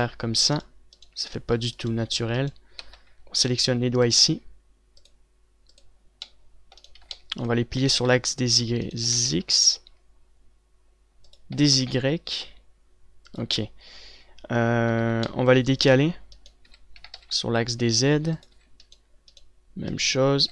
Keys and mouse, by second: 2.8 middle click, 3.2 c, 7.5 z, 8.2 r, 9.5 r, 12.0 r, 15.5 z, 16.1 a, 17.1 z, 17.5 r, 19.1 z.